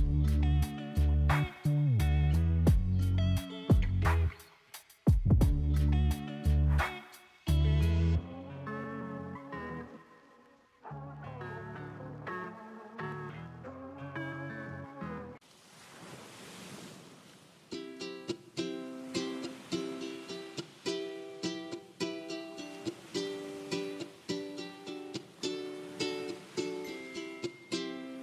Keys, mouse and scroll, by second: 2.0 shift+scroll up 3, 2.6-3.5 scroll up 5, 3.5-5.8 shift+middle drag, 5.8 click, 8.1 click, 11.4 click, 15.3 middle click, 15.9-16.7 scroll down 4, 16.7-19.7 middle drag, 19.7 s, 23.7-26.4 middle drag, 26.4 click.